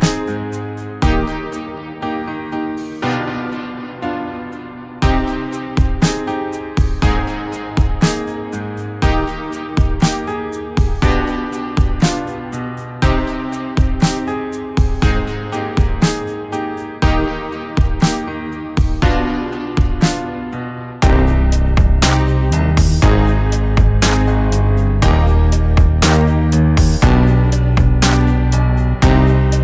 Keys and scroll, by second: 0.7 ctrl+z, 1.6 ctrl+t, 8.7 ctrl+z, 9.0 [, 9.0 [, 10.9 ctrl+z, 12.6 [, 12.6 [, 13.1 [, 14.2-15.6 typing, 14.9 Return, 22.1 ctrl+d, 24.3 ctrl+t, 26.8 ctrl+z, 27.8 ctrl+z.